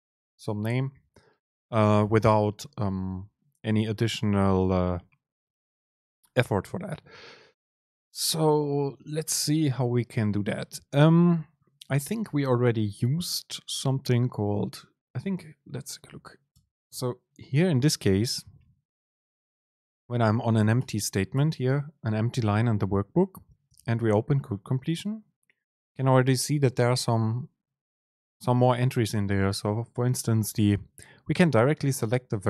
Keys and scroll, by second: 16.2 Up, 16.6 Return, 17.0 super+space, 21.4 Return, 23.8 super+space.